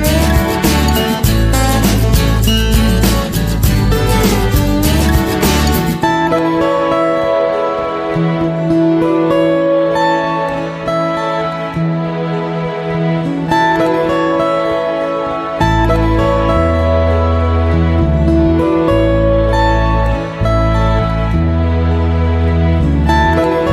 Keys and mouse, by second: 0.5 s, 2.0 g, 3.7 s, 5.0 middle click, 5.6 middle click, 6.2 middle click, 7.0 r, 7.3 z, 8.6 r, 10.0 r, 10.9 KP_3, 11.7 g, 12.7 middle click, 13.3 KP_1, 14.0 g, 15.4 middle click, 16.1 middle click, 17.2 alt+z, 17.8 middle click, 18.9 shift+right click, 19.6 right click, 20.5 shift+right click, 22.0 shift+right click, 22.4 middle click, 23.1 middle click, 23.5 shift+middle click.